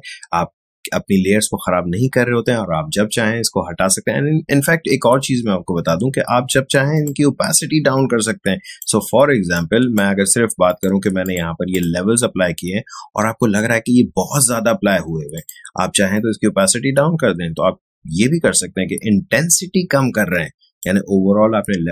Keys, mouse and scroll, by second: 6.9-10.6 shift+drag, 15.3-21.9 shift+drag.